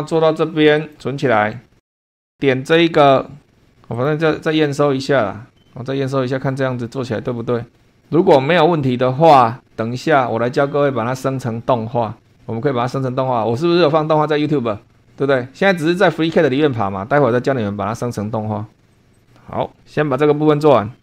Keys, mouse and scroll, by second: 0.8 click, 2.1 click, 3.0 click, 4.0 click.